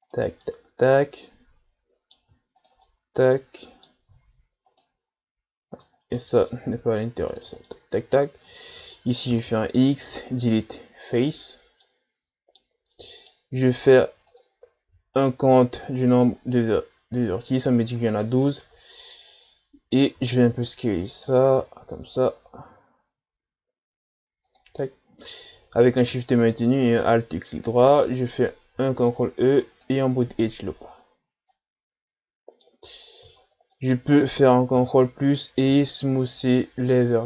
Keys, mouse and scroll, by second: 0.4-2.6 middle drag, 2.6 shift+right click, 2.8-4.7 middle drag, 4.7-6.2 shift+right drag, 6.2 middle click, 6.9 shift+right click, 7.7-9.3 middle drag, 9.3 x, 11.8-13.7 middle drag, 13.7 ctrl+Tab, 15.2 alt+right click, 18.2-20.2 middle drag, 20.2 s, 24.8-26.3 middle drag, 26.3-28.7 alt+shift+right drag, 28.7 ctrl+e, 30.8-31.5 scroll down 1, 31.5-33.4 middle drag, 33.4-33.7 shift+scroll up 4, 33.7-34.8 middle drag, 34.8 ctrl+KP_Add, 35.7 w.